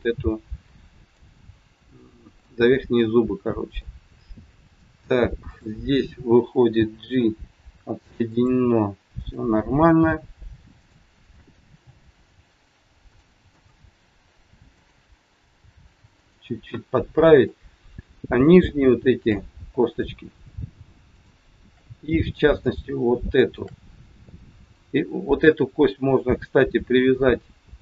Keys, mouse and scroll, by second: 1.1 click, 2.4 shift+middle click, 3.4 scroll up 1, 3.7 middle click, 5.4 click, 6.7 g, 9.2 click, 9.7 g, 11.1 click, 11.6 g, 13.5 click, 14.6 click, 15.4 g, 17.2 click, 18.2 shift+click, 19.8 click, 21.8 shift+click, 22.0 middle click, 23.2 shift+click, 25.2 click.